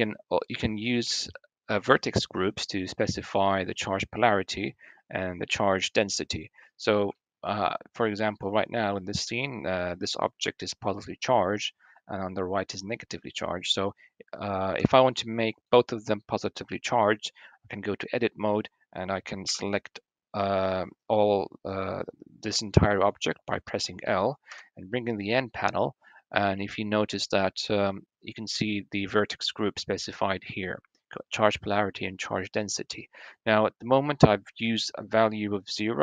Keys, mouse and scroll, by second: 6.9 shift+middle drag, 14.5 Tab, 15.3 click, 19.3 l, 24.2 n, 28.9 click.